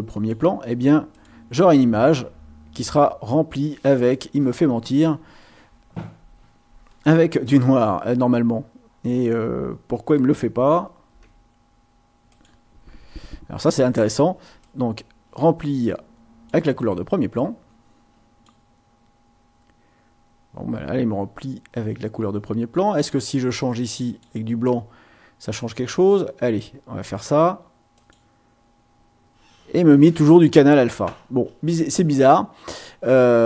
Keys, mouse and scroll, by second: 1.1 click, 10.7 ctrl+z, 12.3 click, 14.6-16.7 drag, 17.4-18.6 drag, 22.8 click, 24.1 click, 25.6 click, 26.1-27.3 drag, 27.9 click.